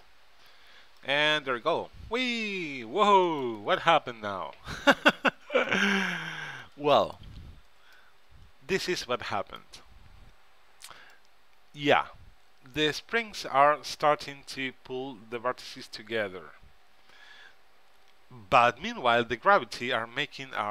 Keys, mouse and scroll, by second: 1.1-2.8 drag, 3.4-5.1 drag, 5.8-7.5 right drag, 8.1-10.9 middle drag, 11.3-13.0 right drag.